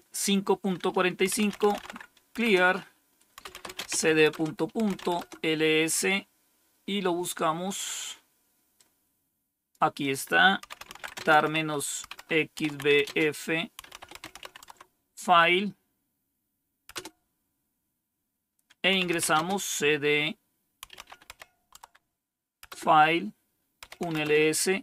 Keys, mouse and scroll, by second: 1.0-5.2 typing, 2.3 Return, 8.7-9.7 drag, 9.9 click, 10.4-14.8 typing, 16.8 Return, 18.6-19.4 typing, 20.5-21.3 typing, 21.7 Tab, 22.6 Return, 22.6-24.8 typing.